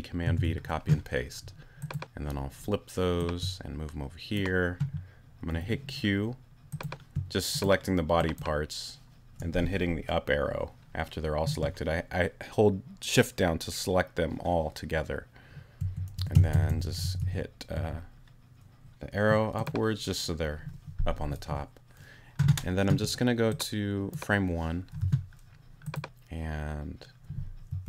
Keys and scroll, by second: 0.2 super+v, 6.5 q, 15.8 Up, 25.0 t.